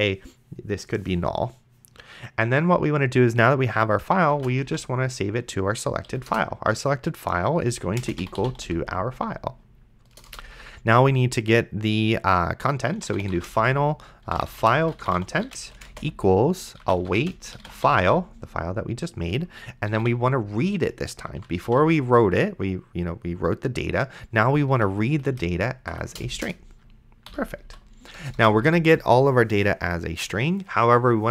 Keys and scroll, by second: 4.5 s, 4.9 e, 6.1 Down, 6.3 Return, 7.5-9.2 typing, 10.1 Return, 12.7-18.6 typing, 19.9 r, 20.2 e, 21.3 a, 21.6 d, 24.5 Down, 25.9 Up, 26.4 Return, 27.3 End, 27.7 ;, 28.2 Return.